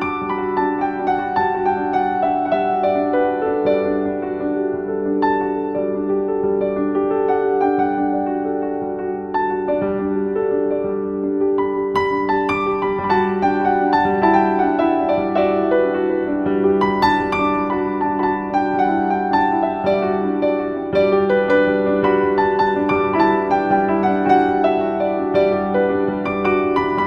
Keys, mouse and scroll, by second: 0.0-4.2 typing, 6.7 typing, 7.5 Return, 9.3 click, 12.1 click, 17.7-18.1 scroll down 1, 18.1-18.4 scroll up 1, 19.1-19.9 scroll down 1, 20.9 right click, 21.8 click, 24.0 ctrl+v, 25.7 click.